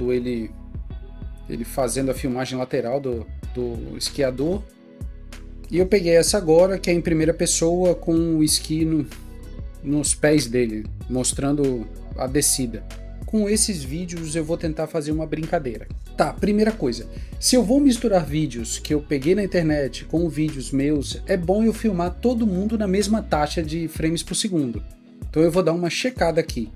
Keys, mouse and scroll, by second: 5.4 double click, 13.2 double click, 25.5 right click.